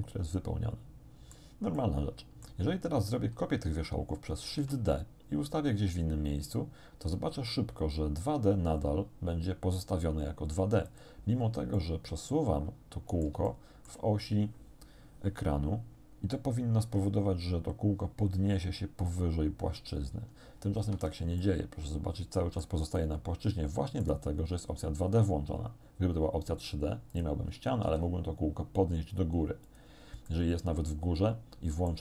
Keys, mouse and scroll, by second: 1.8 click, 4.5 shift+d, 10.9 click, 11.8-14.1 drag, 16.8 g, 20.8 Escape, 21.4-22.8 drag, 23.0-24.2 drag, 27.2 click, 27.9 g, 29.7 click, 30.3-32.0 middle drag, 31.2 click.